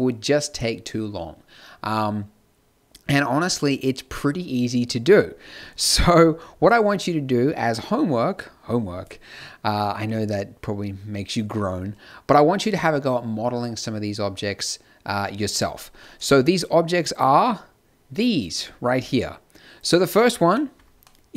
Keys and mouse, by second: 17.1-19.7 drag, 20.4 KP_Decimal, 21.0-21.3 drag.